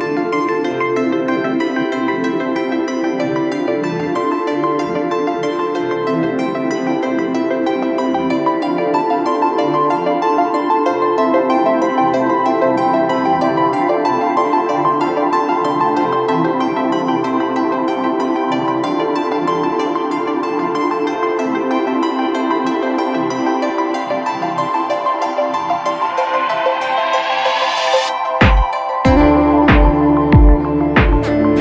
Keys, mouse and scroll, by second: 4.5 right click, 5.7 double click, 19.6-20.5 typing, 23.0 typing, 24.4 double click.